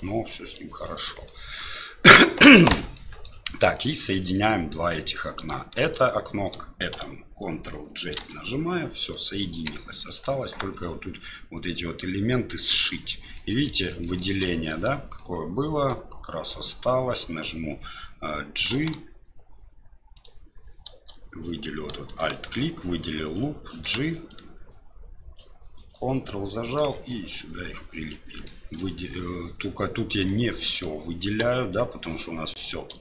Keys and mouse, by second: 0.8 middle drag, 1.2 middle drag, 3.0 middle drag, 3.7 right click, 4.3 right click, 5.9 shift+right click, 9.0 right click, 9.4 middle drag, 10.1 right click, 10.6 Tab, 12.9 shift+middle click, 13.6 shift+middle click, 14.0 shift+middle click, 15.2 middle click, 18.7 g, 22.2 alt+right click, 23.8 g, 27.2-28.5 middle drag, 28.8 a, 30.3 middle click, 31.4 KP_1, 32.0 KP_3.